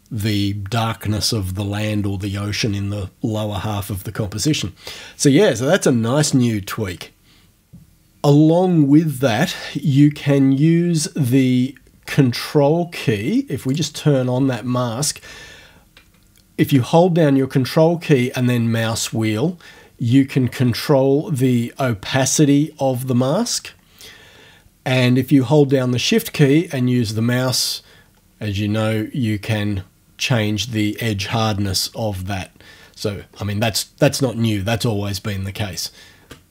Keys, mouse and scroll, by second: 11.6-13.7 scroll down 5, 13.7 click, 18.4-19.4 ctrl+scroll up 2, 19.4-22.5 ctrl+scroll down 5, 22.5-23.2 ctrl+scroll up 2, 23.2-23.7 ctrl+scroll down 2, 23.7-24.0 ctrl+scroll up 2, 24.0-24.4 ctrl+scroll down 2, 27.9-28.5 shift+scroll down 1, 28.6 shift+scroll down 2, 29.2-30.7 shift+scroll up 2, 30.7 shift+scroll down 2, 32.1-32.7 shift+scroll down 2, 32.7-33.7 shift+scroll up 2, 35.0-35.3 shift+scroll down 2.